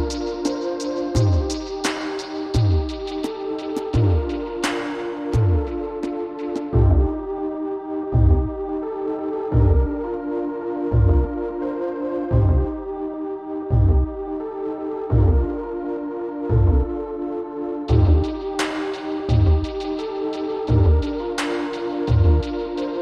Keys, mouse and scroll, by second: 1.0-3.8 right drag, 2.7 click, 4.5 right click, 6.9 Tab, 7.4-9.3 middle drag, 10.2 KP_3, 12.8 click, 15.4 Tab, 20.1 click, 20.9 middle click, 21.8 middle click.